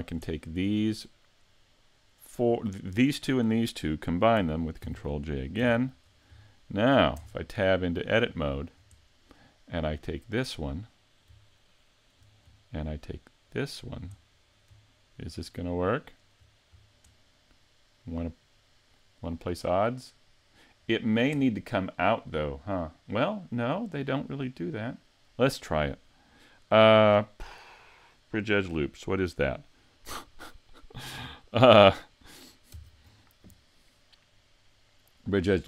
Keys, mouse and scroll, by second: 0.3 shift+middle click, 1.0 middle click, 3.1 shift+right click, 4.8 ctrl+j, 5.6 z, 6.1-6.4 scroll up 3, 6.5 shift+middle click, 7.2 Tab, 7.7 middle click, 8.4 shift+middle click, 9.0 middle click, 10.1 right click, 10.8 middle click, 11.5 shift+middle click, 13.5 shift+right click, 13.5 middle click, 14.2 middle click, 15.3 shift+right click, 16.0 shift+right click, 16.8 scroll down 3, 17.2 middle click, 18.8-19.2 scroll down 1, 19.4 middle click, 21.8 middle click, 25.0 middle click, 32.7 ctrl+e.